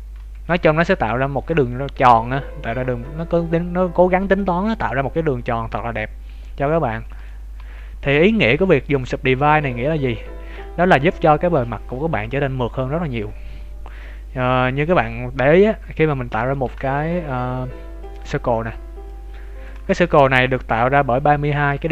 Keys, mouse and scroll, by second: 0.2 z, 0.4 middle click, 7.5 ctrl+z, 8.9 click, 9.6 z, 10.0 z, 10.2 Tab, 10.5 middle click, 11.0 ctrl+z, 12.6-13.2 scroll up 2, 15.6 KP_7, 15.8 scroll down 3, 16.4 shift+middle click, 16.6 shift+a, 19.0 click, 19.9 shift+middle click, 20.2-21.0 scroll up 5, 21.0 Tab, 21.8 shift+middle click.